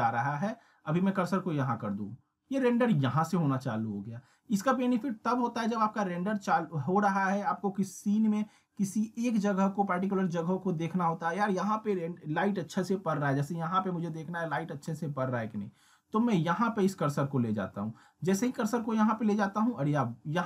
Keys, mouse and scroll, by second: 13.9 scroll up 1, 14.5 middle click, 15.8-16.1 scroll down 1.